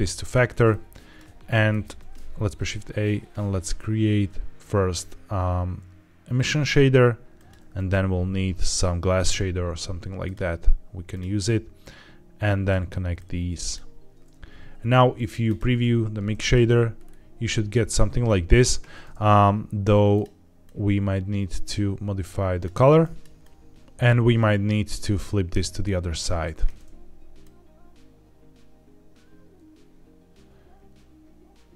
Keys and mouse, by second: 0.6 click, 1.9 shift+a, 7.6 shift+a, 11.8-12.6 drag, 13.0-13.6 drag, 15.3 ctrl+shift+click, 22.9 drag, 23.4 click, 24.3-25.5 drag, 27.3-31.7 drag.